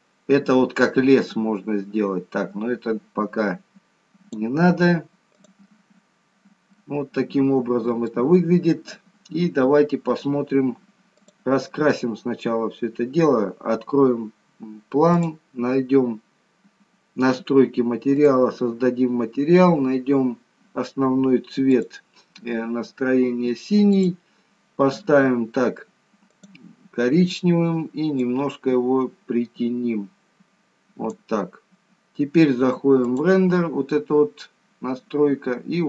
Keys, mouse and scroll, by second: 5.3 click, 6.8 middle click, 11.3 click, 12.9-14.2 scroll down 1, 14.2-15.1 scroll down 1, 15.1 click, 24.0 click, 33.8 click.